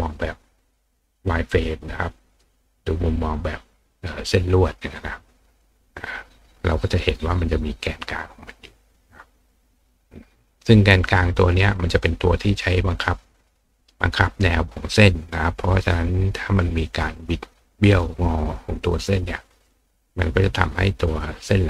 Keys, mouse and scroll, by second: 1.3 click, 6.0 click, 8.8 click, 10.1 click.